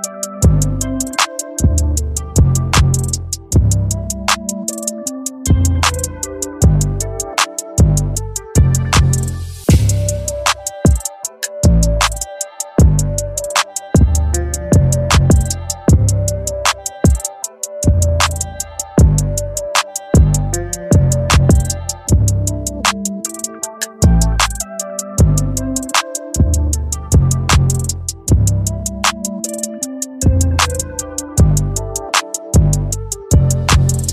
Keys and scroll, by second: 30.2 ].